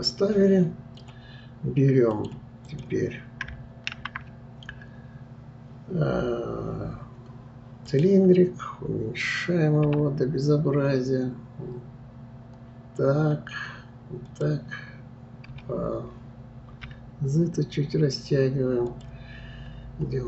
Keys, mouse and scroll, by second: 2.1 middle click, 2.6 click, 3.9 shift+a, 19.5-19.9 scroll up 1.